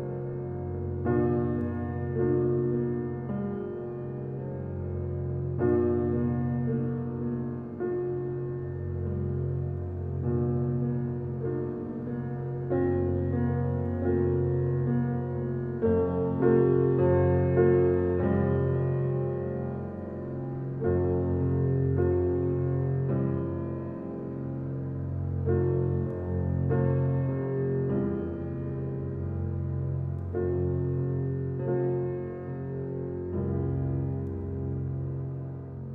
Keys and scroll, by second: 1.9 g, 23.2 space, 29.5 space, 33.0 1, 33.3 0.